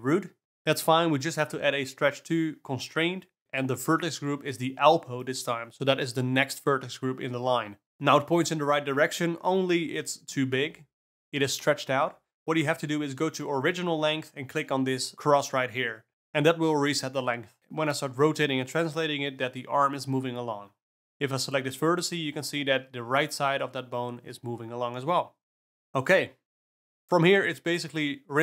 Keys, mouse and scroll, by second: 1.3-4.2 drag, 6.8-15.1 drag, 15.1-17.6 alt+middle drag, 17.6 click, 17.9-18.4 alt+middle drag, 18.4 Tab, 19.0 a, 19.7 t, 20.0 y, 20.7 x, 22.0 r, 22.8 alt+a, 22.8 2, 23.0 click, 23.4 g, 27.0 click, 28.0 click.